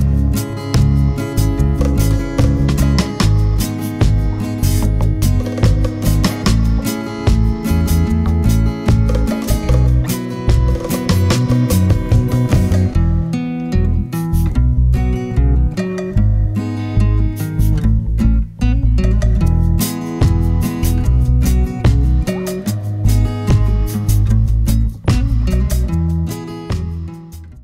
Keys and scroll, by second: 15.5 super+a.